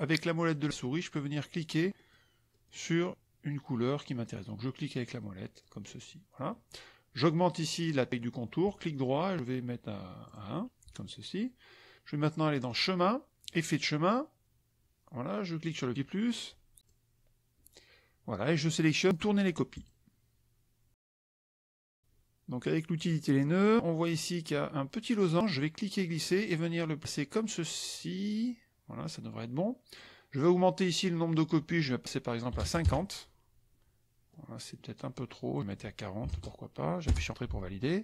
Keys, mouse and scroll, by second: 0.4 click, 1.0 click, 1.6 click, 2.1 click, 2.6 click, 3.6 click, 4.2 click, 4.7 click, 5.0 click, 6.4 middle click, 8.6 right click, 10.2 click, 12.5 click, 13.5 click, 15.6 click, 16.8 click, 19.7 click, 22.9 click, 25.6-30.1 drag, 31.3 click, 32.6 KP_0, 32.8 KP_Enter, 34.3 click, 35.4 click, 36.2 KP_4, 37.0 Return.